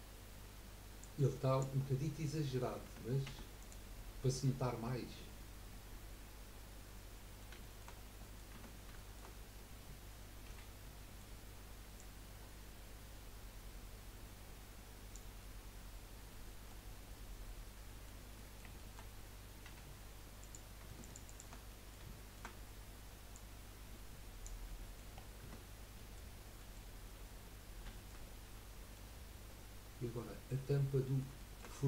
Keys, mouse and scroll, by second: 1.0 click, 1.9-2.3 scroll up 1, 2.3 middle click, 2.8 Tab, 3.2 Tab, 3.6 click, 3.9-7.0 middle drag, 7.6-7.9 shift+middle drag, 7.9 scroll up 3, 8.5 Tab, 8.9-10.5 shift+middle drag, 10.5 l, 10.8-11.9 middle drag, 11.9 click, 15.4-16.8 middle drag, 16.8 scroll up 4, 17.1-19.7 middle drag, 20.4 click, 21.0 alt+shift+click, 21.2 alt+shift+click, 21.7 middle click, 22.5 scroll up 1, 23.3 click, 24.7 middle click, 25.2-25.9 scroll down 7, 25.4 Tab, 25.9-26.7 middle drag, 27.6-27.9 scroll down 2, 27.9 shift+middle click, 28.2 scroll up 2, 28.5 middle click, 30.5-30.9 scroll up 2, 30.9 middle click.